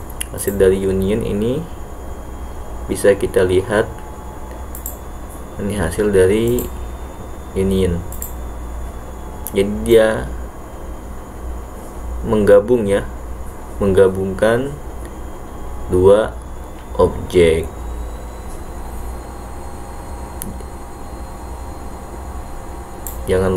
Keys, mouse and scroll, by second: 0.5 click, 5.1 click, 7.0 click, 8.4 click, 10.0-23.2 drag.